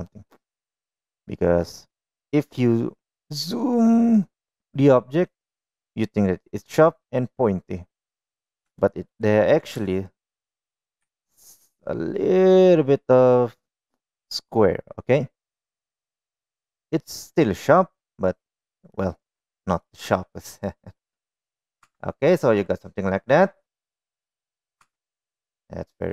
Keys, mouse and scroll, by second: 9.2 shift+middle click, 10.2 shift+middle click, 11.4 s, 18.7 middle click, 20.3 middle click, 21.4 middle click, 22.3 Tab, 22.8-23.8 middle drag, 24.6-25.0 middle drag, 25.3 Tab, 26.0 middle click.